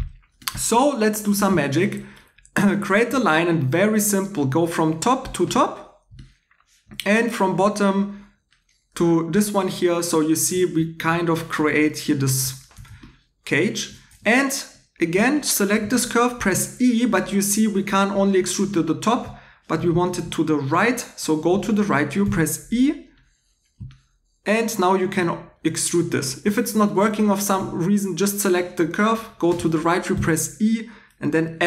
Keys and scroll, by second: 14.1 2, 15.8 e, 18.7 Home, 22.2 e, 26.2 Escape, 27.3 2, 30.1 e.